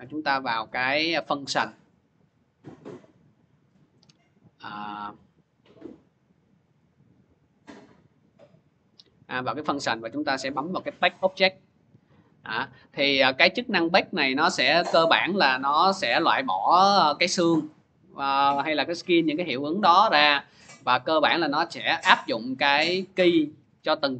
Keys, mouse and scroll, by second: 1.1 click, 3.2 click, 6.8 click, 7.6 click, 8.3 click, 10.7 click, 12.4 click, 13.5 click, 14.7 click, 23.2 click, 23.9-24.1 drag.